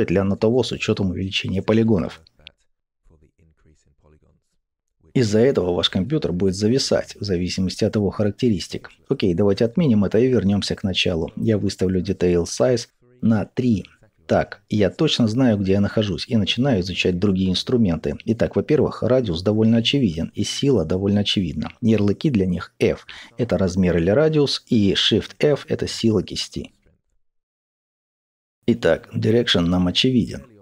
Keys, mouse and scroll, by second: 0.0-0.7 scroll down 1, 0.9-11.0 middle drag, 9.0 ctrl+z, 11.0-24.9 drag, 12.9 Return, 21.7 f, 26.0 shift+f, 27.3 f, 27.6 click, 28.1-30.6 middle drag.